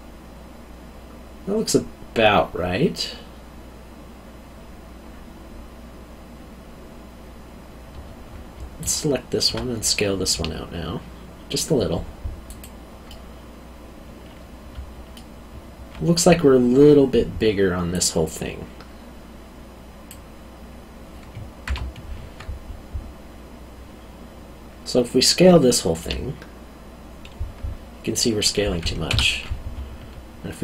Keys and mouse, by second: 8.8 alt+click, 10.3 s, 12.5 click, 13.1 middle click, 17.9 click, 26.0 s, 29.1 Escape.